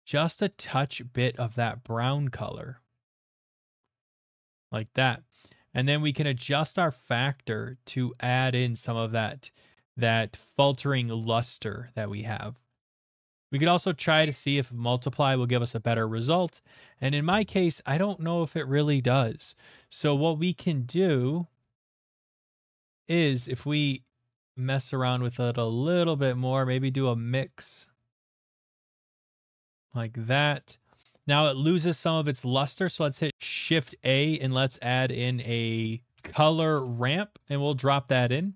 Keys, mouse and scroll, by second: 0.5 click, 4.4 click, 5.0 click, 8.9 click, 9.3 click, 9.9 click, 10.2 click, 10.7 click, 12.8 click, 15.5 scroll down 1, 16.9 middle click, 17.4 Down, 17.4 middle click, 18.1 middle click, 18.4 middle click, 18.4 middle click, 18.5 middle click, 19.0 shift+middle click, 20.6 middle click, 21.9 click, 22.4 click, 24.5 click, 24.9 click, 25.4 click, 26.3 click, 28.9 click, 29.1-30.0 scroll, 30.2 middle click, 30.4 middle click, 31.0 middle click, 31.5 shift+middle click, 32.6 middle click, 33.3 Caps_Lock, 33.3 Escape, 33.3 ctrl+a, 33.3 BackSpace, 36.1 click, 36.1-36.5 typing, 36.7 Return, 37.4 click.